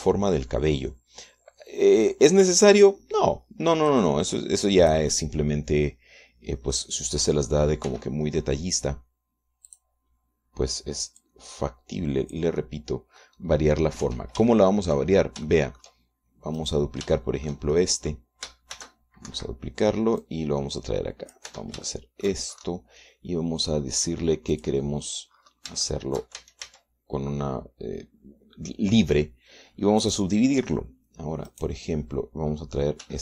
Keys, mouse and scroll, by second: 0.1 Tab, 0.5 right click, 3.6 right click, 5.2-6.4 drag, 7.4 click, 8.2 middle click, 9.1 r, 11.0 click, 11.3-12.5 middle drag, 12.5-13.8 drag, 13.9 click, 14.7 middle click, 15.3 Tab, 15.8 shift+click, 16.7 shift+click, 17.9 click, 18.5 shift+click, 19.0 shift+click, 20.1 shift+d, 20.6 Escape, 21.5-22.8 drag, 22.8 Tab, 23.2 shift+middle click, 25.9 click, 27.1 shift+click, 27.7 shift+a, 31.3 click, 32.8 click.